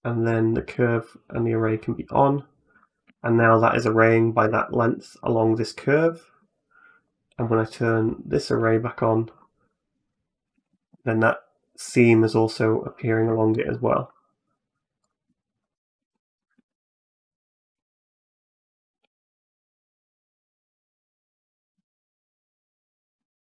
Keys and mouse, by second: 0.5 click, 2.0 middle click, 3.0 shift+middle click, 3.3 middle click, 4.4 shift+middle click, 5.9 middle click, 6.9 right click, 8.6 click, 9.2 middle click, 10.4 a, 10.5 a, 11.7 middle click, 13.1 shift+click, 13.5 middle click, 14.8 right click, 15.4 right click, 16.0 middle click, 16.4 Tab, 17.0 right click, 17.2 shift+click, 18.7 e, 20.6 middle click, 21.1 shift+middle click, 21.6 e, 22.2 e, 23.1 shift+click.